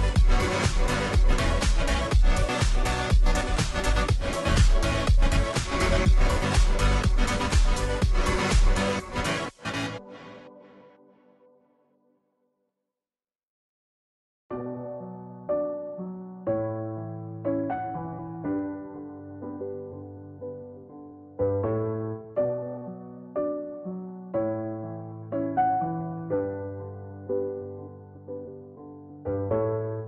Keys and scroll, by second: 9.0-10.1 typing, 20.2 ctrl+t, 23.9 Return, 27.0 ctrl+t.